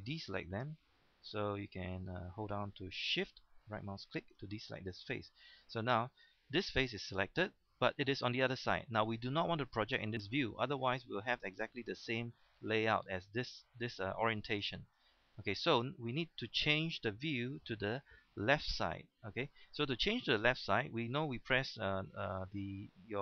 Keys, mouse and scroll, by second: 4.0 shift+right click, 4.5-4.8 scroll down 1, 5.0 shift+middle click, 10.7 scroll down 1, 15.0-15.4 scroll up 1, 15.7 shift+middle click.